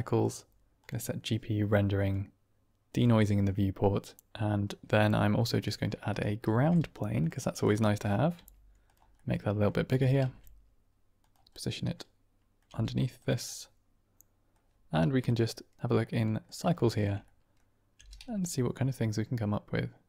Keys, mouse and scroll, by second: 0.2-0.8 drag, 1.9 click, 2.8 click, 6.0 shift+right click, 6.3 shift+a, 8.2 s, 8.7 click, 9.0-9.5 drag, 9.8 g, 10.1 shift+z, 11.1 click, 11.4-12.3 drag, 12.3 middle click, 12.6 g, 13.1 click, 13.4-14.4 middle drag, 15.9-16.4 middle drag, 16.7-17.0 shift+middle drag, 17.3 middle click, 18.1 g, 18.3 z.